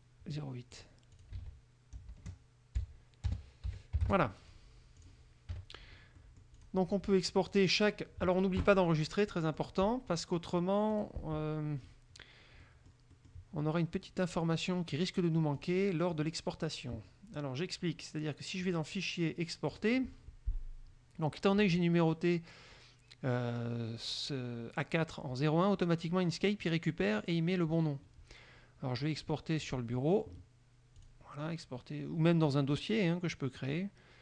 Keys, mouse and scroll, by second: 0.9 click, 1.3 ctrl+click, 1.5 ctrl+a, 2.1 KP_0, 3.5 BackSpace, 3.9 KP_8, 5.2 click, 5.7 KP_Subtract, 6.3 middle click, 6.7 click, 7.7 click, 9.2 click, 10.3 click, 11.1 click, 12.8 middle click, 13.8 middle click, 15.7 click, 16.3 click, 18.8 click, 19.9 click, 29.8 click, 31.2 click.